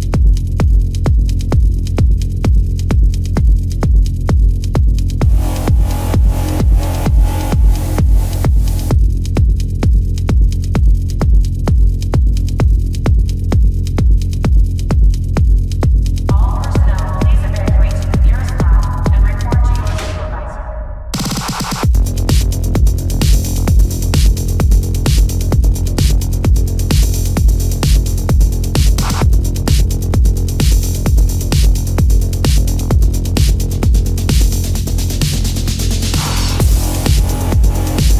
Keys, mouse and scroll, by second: 2.6 ctrl+alt+z, 5.0 space, 7.1 ctrl+-, 8.9 right click, 10.0 ], 16.0 ctrl+-, 16.5 ctrl+-, 20.1 ctrl+alt+z, 22.7 ctrl+=, 35.6 right click.